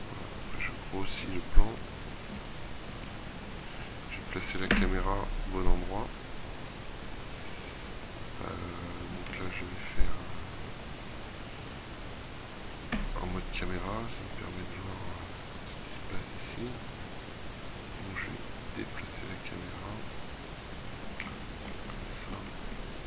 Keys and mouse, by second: 0.5 click, 1.2 s, 2.3 s, 4.8 ctrl+KP_0, 9.4 z, 13.0 KP_0, 18.6-20.8 middle drag, 21.4-23.0 middle drag.